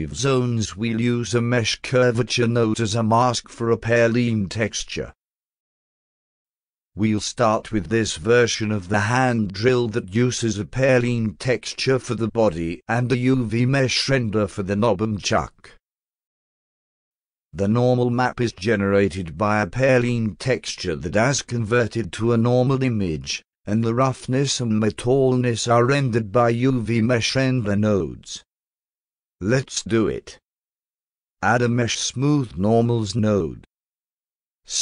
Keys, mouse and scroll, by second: 2.3 click, 2.5 click, 4.3 click, 4.7 click, 6.6 click, 6.8 click, 30.7 click, 32.7-33.5 drag.